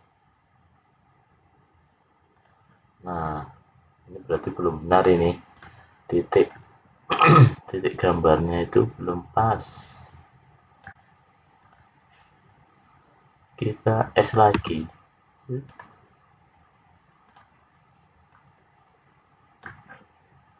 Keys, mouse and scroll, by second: 5.0 click, 6.3 click, 7.9 click, 11.5 click, 14.5 s, 17.2 click, 18.2 click.